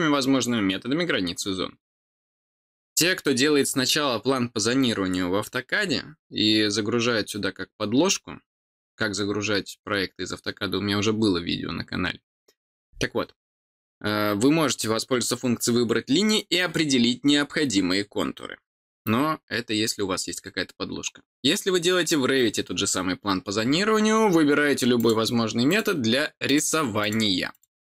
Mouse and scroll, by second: 24.9 click, 25.6 click, 26.4 click, 27.0 click, 27.5 click.